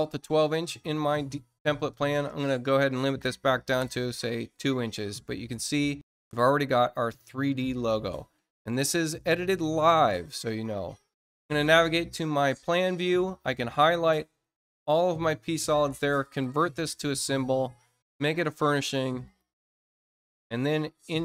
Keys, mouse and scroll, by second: 1.8 click, 3.2 2, 11.3 click, 13.2 shift+click, 16.1 click, 19.2 click.